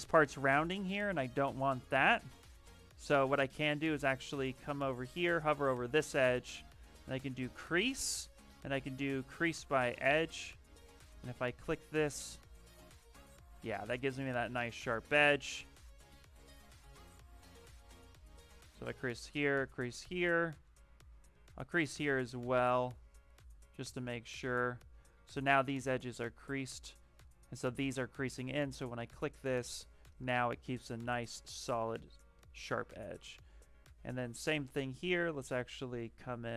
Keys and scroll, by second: 0.5 shift+d, 2.3 s, 5.5 space, 11.9-14.0 typing, 28.4 d, 33.2 shift+d.